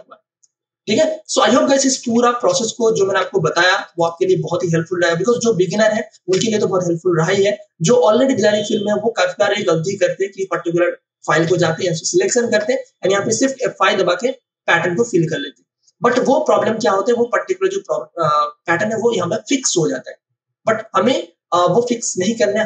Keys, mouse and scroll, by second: 1.4 click, 2.0 space, 2.8 click, 3.1 ctrl+space, 3.5 ctrl+alt+click, 10.4 ctrl+click, 11.4 ctrl+w, 11.9 ctrl+click, 13.3 shift+F5, 16.0 Return.